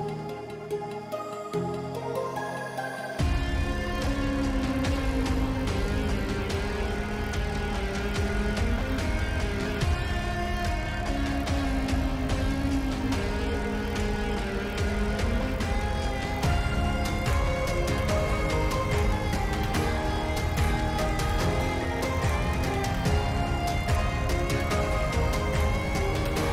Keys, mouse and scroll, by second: 0.9 shift+middle click, 5.4 shift+d, 6.7 p, 8.7 Tab, 10.2 click, 10.9 middle drag, 11.4 g, 13.5-14.2 shift+middle drag, 14.3 middle click, 14.8 shift+middle drag, 16.8 g, 20.1 click, 21.3 shift+middle click, 21.8 shift+middle click, 23.8-24.4 middle drag, 25.2 middle click, 25.8 shift+middle drag, 26.3-26.5 shift+middle drag.